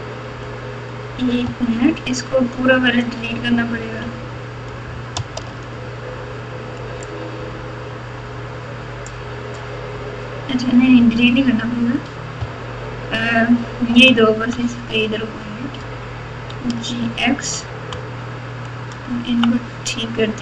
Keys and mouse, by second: 1.4 KP_1, 4.0 KP_Divide, 5.3 alt+z, 7.2-9.0 drag, 12.4-13.9 ctrl+KP_8, 15.7 g.